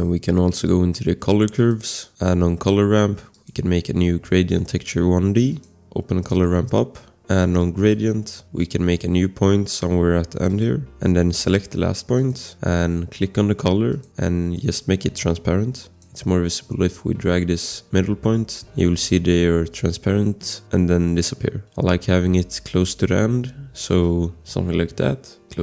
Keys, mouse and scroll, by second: 1.6 click, 3.3 click, 5.4-6.0 scroll, 5.5 click, 7.8 click, 10.5 click, 12.2 click, 13.7 click, 15.6 click.